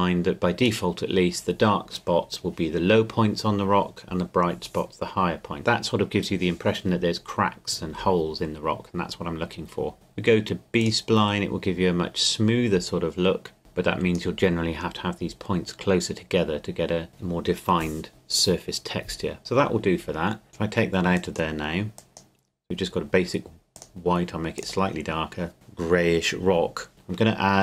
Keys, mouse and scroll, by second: 9.9 click, 13.6 click, 20.5 click, 24.7 click.